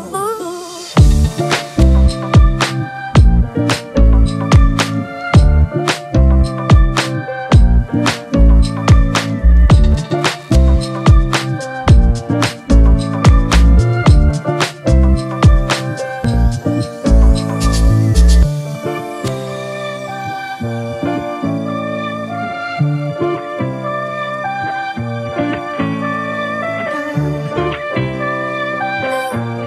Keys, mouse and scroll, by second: 2.3-4.8 scroll up 1, 4.8-6.0 scroll down 1, 7.1-8.2 scroll up 1, 8.6 shift+click, 11.8 ctrl+t, 12.9 alt+shift+click, 14.9 Left, 15.1 Left, 16.7 Return, 21.8-22.6 typing.